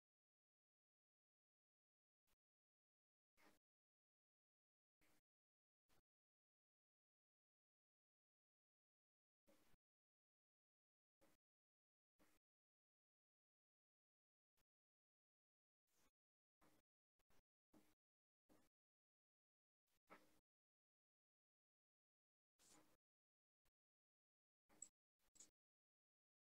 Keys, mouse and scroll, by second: 2.3-3.7 middle drag, 3.7 click, 6.7-9.8 drag, 14.0-16.7 scroll up 11, 16.7-23.0 drag, 23.2-26.4 drag.